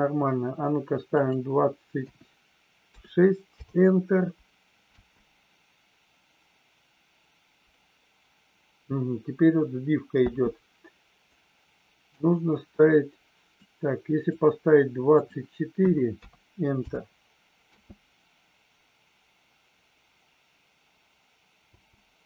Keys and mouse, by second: 1.1 click, 4.9 space, 10.1 space, 11.2-12.1 drag, 13.7 click, 15.2-16.9 drag, 17.6 space, 21.7 space.